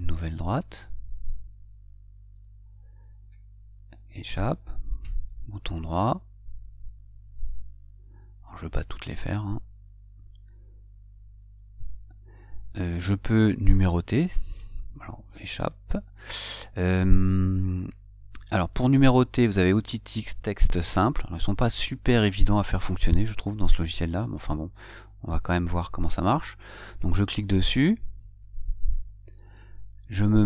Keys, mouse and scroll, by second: 2.6 click, 3.5 Escape, 4.6 right click, 7.4 click, 10.1 click, 16.0 Escape, 27.4 click.